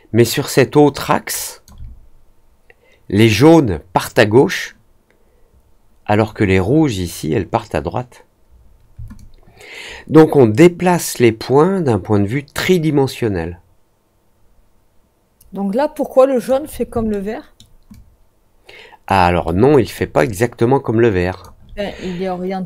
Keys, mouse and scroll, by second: 9.1-16.4 alt+drag, 17.0 alt+middle click, 17.8-19.0 alt+drag, 19.4 alt+middle click, 20.2-21.4 alt+drag.